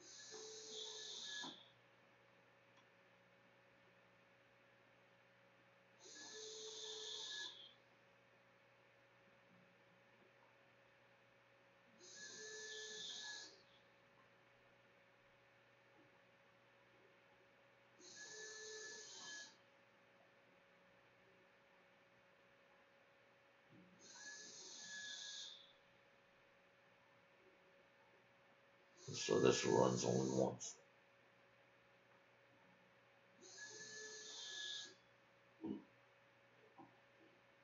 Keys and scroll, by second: 0.0-6.4 typing, 7.5 Tab, 8.6-10.0 typing, 10.4 Delete, 10.5 Return, 11.9 shift+Return, 12.1-14.9 typing, 13.3 Return, 29.2-30.0 typing, 31.1 Delete, 32.3 Delete, 33.0-34.3 typing, 35.0 ctrl+a, 35.1 ctrl+s.